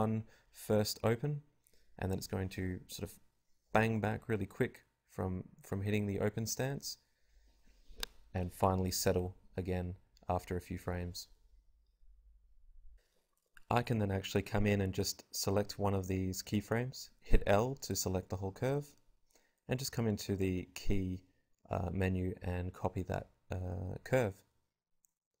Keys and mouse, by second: 1.4-3.8 drag, 5.9 alt+a, 7.4-8.9 drag, 8.9-14.1 right drag, 14.4 right click, 15.3 l, 17.4 click, 18.4 click, 19.6 ctrl+c, 22.3 click, 24.1 i.